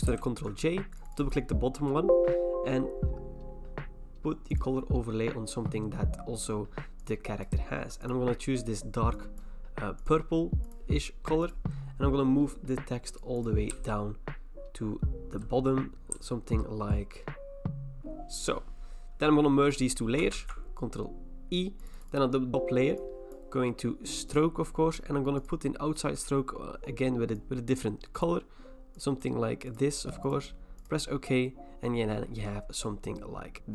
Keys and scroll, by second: 0.1 ctrl+j, 14.2 Down, 14.5 Down, 14.7 Down, 14.8 Down, 14.9 Down, 15.1 Down, 15.1 Down, 15.3 Down, 16.1 Down, 16.6 Down, 16.7 Down, 16.8 Down, 17.9 Down, 20.3 ctrl+e.